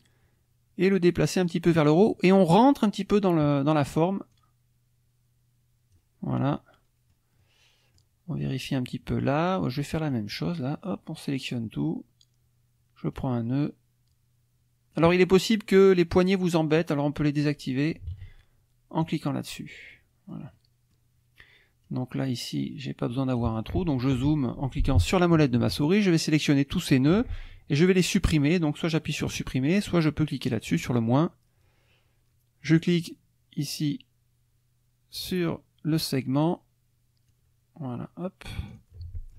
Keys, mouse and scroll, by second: 4.3-6.2 drag, 6.4 click, 7.4 click, 8.9 click, 10.1-11.6 drag, 13.1-15.1 drag, 16.2 click, 18.1 ctrl+z, 19.0 click, 20.0 click, 20.6 click, 21.8-23.8 drag, 23.6 right click, 24.0 click, 25.8-26.9 drag, 30.5 click, 32.8-36.2 drag, 36.2 click, 37.3-38.6 drag, 38.7 click.